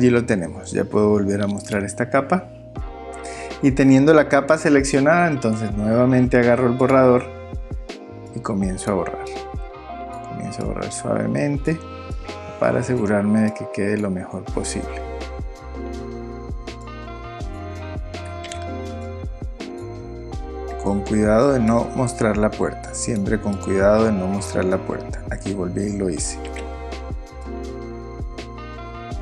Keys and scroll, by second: 18.5 super+z, 26.5 super+z.